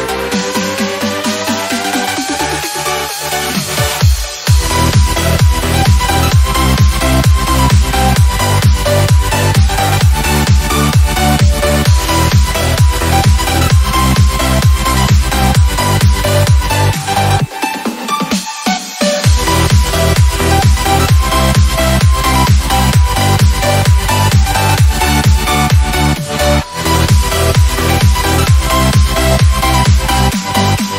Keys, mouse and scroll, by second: 0.0 e, 1.2 f, 4.8 click, 6.3 f, 8.8 b, 13.0 click, 15.0-16.9 typing, 19.4 click, 20.5 typing, 22.7 c, 23.6 BackSpace, 24.8 a, 27.4 click.